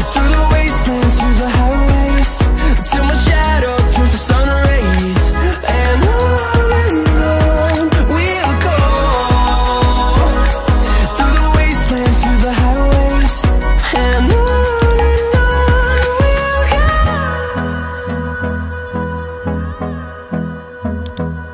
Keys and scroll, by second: 0.7 ctrl+alt+z, 0.9 ctrl+alt+z, 1.4 ctrl+alt+z, 2.6 ctrl+d.